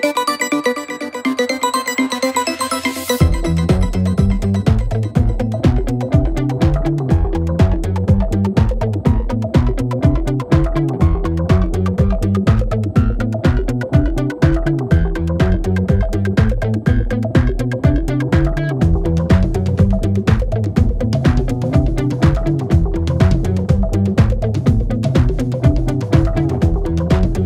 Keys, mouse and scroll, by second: 10.7-11.5 scroll up 6, 11.5-12.2 scroll down 5, 12.2-12.6 scroll up 1, 12.6 scroll down 1, 13.7-16.3 drag, 18.8 click, 19.8 click, 20.6 click, 21.9-24.2 drag, 24.2-25.9 scroll up 4, 25.9-27.2 drag.